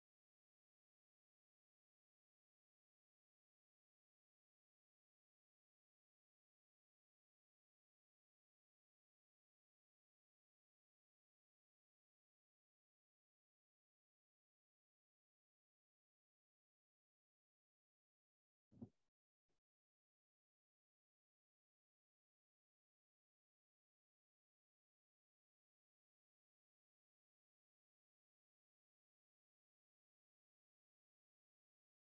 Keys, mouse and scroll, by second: 4.2 F15.